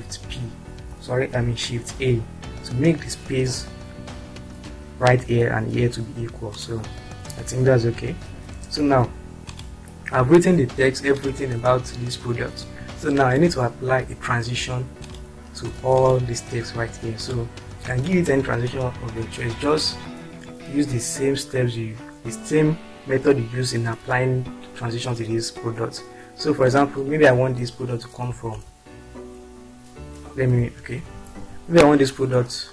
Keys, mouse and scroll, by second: 0.3 shift+p, 1.3 ctrl+z, 2.0 shift+a, 6.6 click, 16.0 click, 28.3 Right, 31.0 ctrl+z.